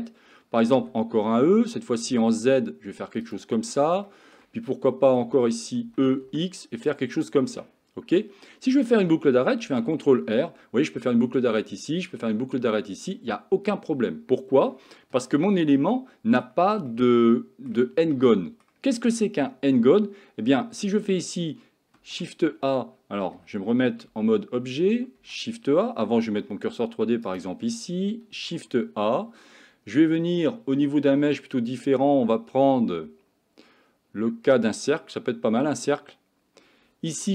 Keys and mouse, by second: 0.8 e, 4.1 shift+middle click, 4.9 middle click, 5.8 e, 7.6 middle click, 9.7 ctrl+r, 16.0 middle click, 16.9 shift+middle click, 18.1 middle click, 22.0 shift+a, 24.1 Tab, 25.2 shift+a, 27.3 shift+right click, 28.4 shift+a.